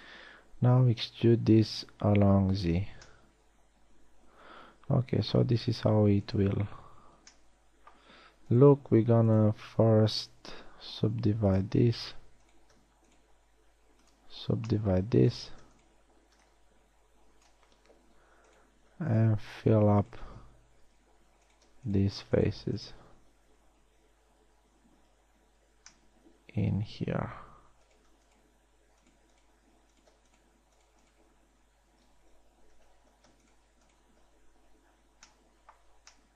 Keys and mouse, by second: 1.0 e, 10.9 w, 14.0 w, 17.0-18.9 middle drag, 19.1-21.4 right drag, 21.4 f, 23.8 f, 24.7 a, 30.2 f, 31.9 f, 33.3 ctrl+z, 35.5 f.